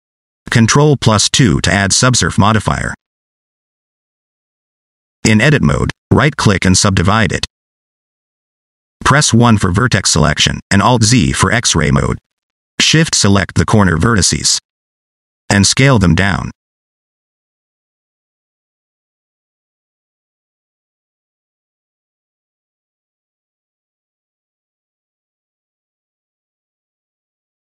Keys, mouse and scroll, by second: 0.1 ctrl+a, 0.8 shift+middle click, 1.3 scroll up 2, 2.7 ctrl+2, 5.1 scroll down 2, 5.2 middle click, 5.5 shift+middle click, 6.1 Tab, 7.0 right click, 8.9 1, 10.5 click, 11.3 alt+z, 12.7 click, 13.5 shift+click, 14.2 shift+click, 14.7 scroll down 1, 15.1 shift+middle click, 16.6 shift+click, 18.3 middle click, 18.9 alt+z, 19.4 s, 21.1 click, 21.5 middle click, 22.2 shift+click, 22.4 middle click, 23.1 s, 24.5 scroll down 1, 24.5 middle click, 25.5 middle click, 25.9 alt+z, 26.1 middle click, 26.5 click, 27.1 middle click.